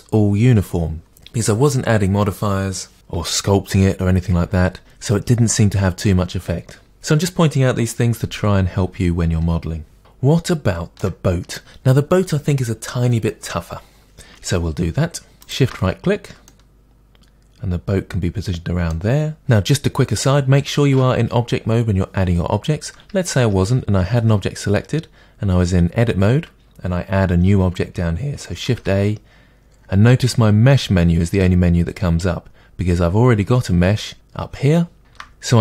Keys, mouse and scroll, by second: 10.0 shift+middle click, 13.8-15.4 middle drag, 15.4 shift+right click, 16.5-18.7 middle drag, 19.4-21.8 scroll down 1, 23.4 Tab, 28.7 shift+a, 35.0 shift+a.